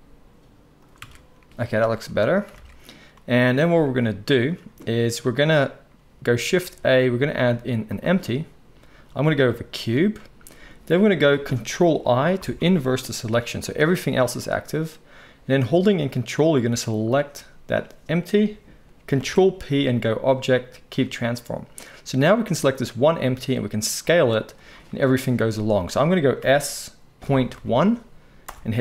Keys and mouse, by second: 1.0 Tab, 1.5-2.1 drag, 1.5 z, 2.1-14.2 shift+right drag, 2.5 alt+a, 6.6 shift+a, 12.3 ctrl+i, 13.6 g, 14.2-15.1 middle drag, 16.7 shift+click, 19.1 ctrl+p, 22.2 click, 22.5-23.2 middle drag, 23.2 s, 26.4 s.